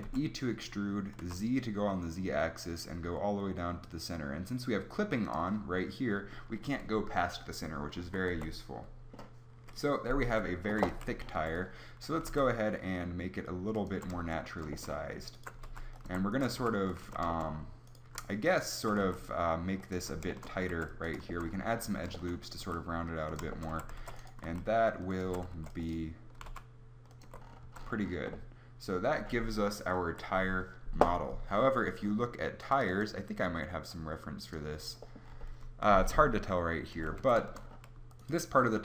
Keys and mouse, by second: 0.1 e, 5.4-7.4 drag, 7.9 middle click, 8.1 Tab, 8.3 z, 9.6 KP_3, 10.3 Tab, 10.7 z, 11.0 a, 11.3 b, 12.2 g, 13.9 click, 14.0 a, 15.3-16.5 drag, 15.6 g, 16.1 a, 16.5 g, 17.0 a, 19.0 s, 20.0 a, 20.8 ctrl+r, 22.6 s, 23.8 a, 24.0 ctrl+r, 24.4 s, 25.3 a, 25.5 ctrl+r, 26.4 g, 27.2 Tab, 27.6 z, 30.1 KP_7, 32.6-34.3 drag, 37.2 Tab.